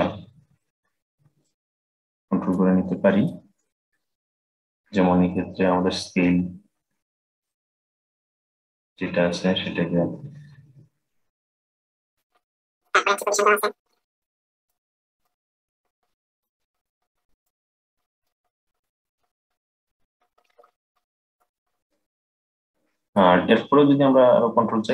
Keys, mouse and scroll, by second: 2.9-5.2 drag, 5.2-7.1 scroll up 5, 7.1-10.1 drag, 12.2-14.5 middle drag, 14.5-16.5 drag, 16.7-18.0 drag, 18.1 click, 18.9-20.2 drag, 21.7-24.6 middle drag.